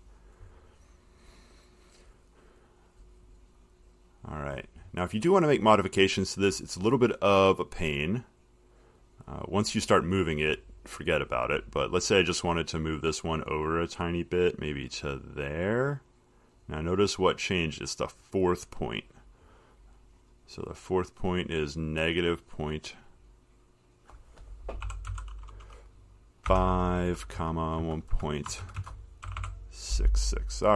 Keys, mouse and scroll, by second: 0.3 click, 1.1 click, 2.6 middle click, 6.0 middle click, 6.0 middle click, 6.1 middle click, 8.0 click, 9.3 click, 14.9 click, 17.0 click, 18.9-21.0 drag, 23.3 click, 25.1 typing, 26.7-30.4 typing, 28.8 shift+Right, 29.0 shift+Right.